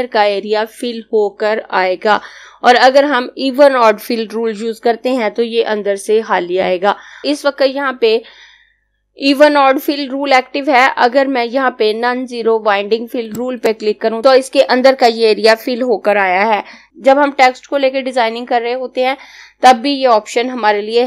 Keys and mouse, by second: 13.2 click.